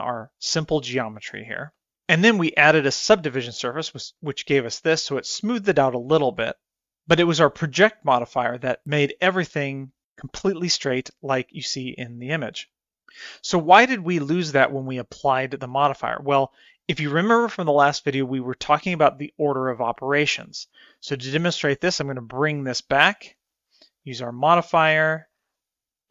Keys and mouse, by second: 2.0 Tab, 3.9 click, 4.8-5.7 middle drag, 21.1-22.6 drag, 23.9-25.1 drag, 25.8-26.1 drag.